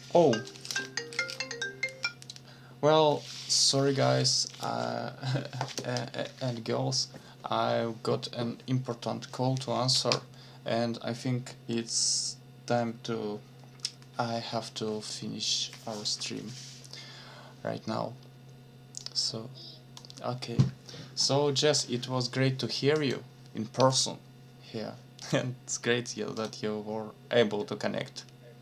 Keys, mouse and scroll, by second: 19.0 click, 21.2 click, 22.9 click, 25.2 click, 26.4 click.